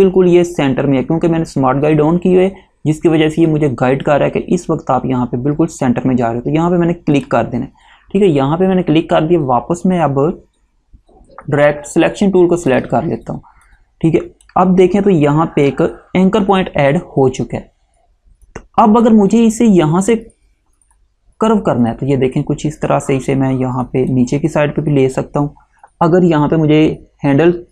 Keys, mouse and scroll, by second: 7.3 click, 12.8 click, 18.6 click.